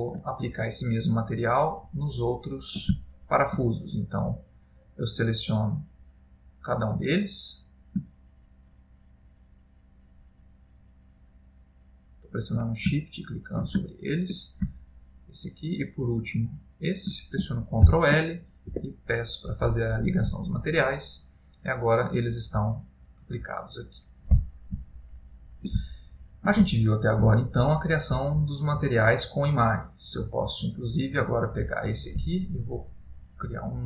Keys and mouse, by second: 2.2 ctrl+middle click, 3.1 shift+middle click, 4.6 click, 5.7 click, 7.2 click, 8.6 shift+click, 9.5 shift+click, 9.5 click, 10.0 shift+click, 11.5 shift+click, 13.0 shift+click, 13.0 shift+middle click, 13.9 middle click, 15.1 shift+click, 16.4 shift+click, 18.0 ctrl+l, 21.3 click, 22.0 middle click, 25.0 ctrl+middle click, 26.0 shift+middle click, 26.8 ctrl+middle click, 27.7 middle click, 30.7 click, 33.1 click.